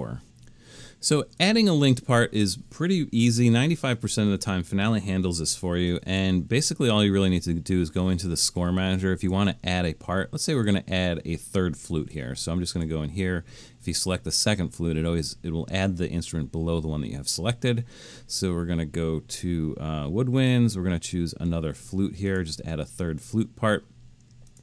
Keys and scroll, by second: 6.1 super+k.